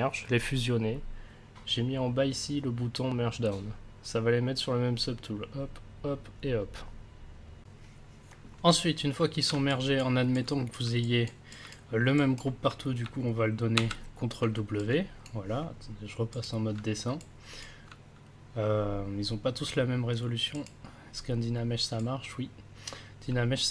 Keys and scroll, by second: 13.7 ctrl+w.